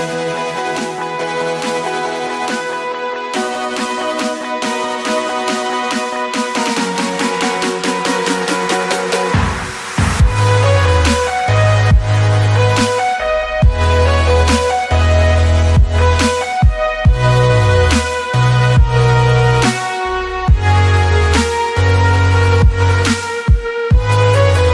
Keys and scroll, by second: 2.4 ctrl+z, 4.9 ctrl+x, 5.0 c, 5.2 alt+Tab, 5.7 Tab, 11.5 Escape, 12.1 1, 12.3 Escape, 13.3 space, 18.8 shift+Escape.